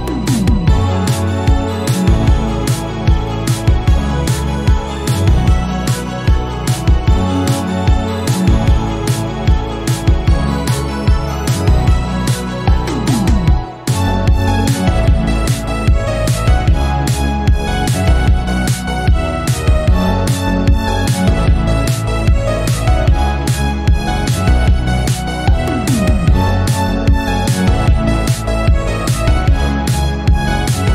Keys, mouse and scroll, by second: 0.6-2.2 drag, 2.2-3.5 middle drag, 4.7-6.9 drag, 7.0 middle click, 7.8 KP_7, 8.8-10.2 drag, 11.1-13.5 right drag, 13.5 Tab, 14.1 Tab, 14.5-15.8 right drag, 16.2-16.8 scroll down 1, 16.8 KP_3, 17.3 click, 18.1 shift+middle click, 18.4 scroll up 3, 18.6 shift+middle click, 19.1 click, 19.3-19.7 scroll up 1, 19.7 shift+middle click, 20.1-20.4 scroll up 1, 20.4 click, 22.5-23.0 scroll down 7, 23.0 click, 23.2 scroll up 1, 23.4 shift+middle click, 23.6 click, 24.5 r, 26.6 middle click, 26.9-27.5 scroll down 5, 27.5 KP_1, 28.0 scroll up 1, 28.6 click, 29.3 shift+middle click, 29.6 scroll up 2, 29.8 shift+middle click, 30.5 click.